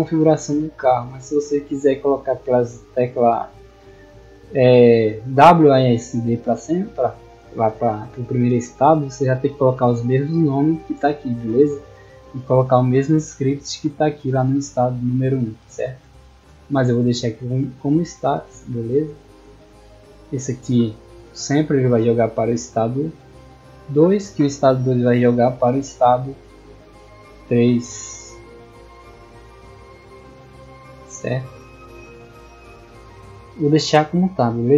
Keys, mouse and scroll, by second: 0.1 click, 1.3 middle click, 2.5 click, 4.2 click, 4.5 click, 5.4 middle click, 10.2 middle click, 12.3 click, 13.8 click, 15.1 click, 16.1 middle click, 18.2 click, 18.9 middle click, 22.2 middle click, 23.3 click, 23.8 click, 25.6 click, 26.4 middle click, 28.1 middle click, 30.1 click, 31.0 middle click, 32.0 click, 32.6 middle click, 33.4 click.